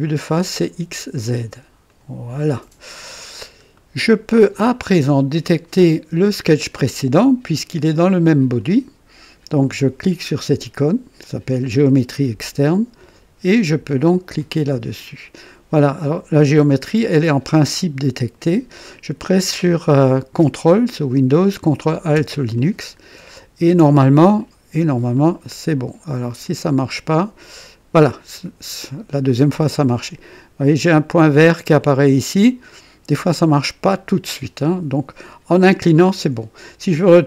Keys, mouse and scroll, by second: 0.0 click, 1.8 click, 3.2 scroll up 1, 3.7-4.4 right drag, 8.5 click, 14.1 click, 22.5-23.9 drag, 25.1 click, 26.4 click.